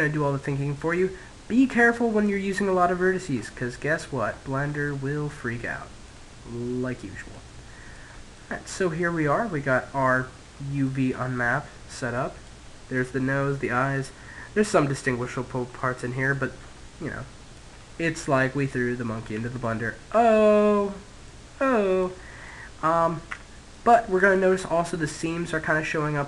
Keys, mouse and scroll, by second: 0.5-1.9 scroll up 1, 1.9-3.7 scroll down 1, 3.7-6.1 scroll down 1, 9.5 scroll up 1, 14.1-18.6 middle drag, 20.2-21.9 middle drag, 22.2 Tab, 22.9 middle click, 23.8 middle click, 25.2 middle click, 25.9-26.2 middle drag.